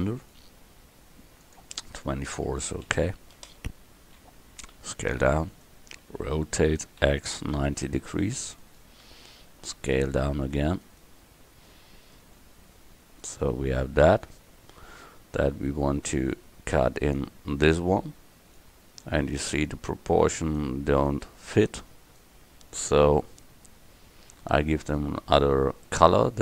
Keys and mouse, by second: 1.5-3.9 drag, 4.8 s, 6.6 r, 9.1 s, 11.7-13.3 drag, 16.0-17.2 middle drag, 19.2 click, 20.3-22.9 drag, 22.9 KP_1, 23.0-26.1 middle drag.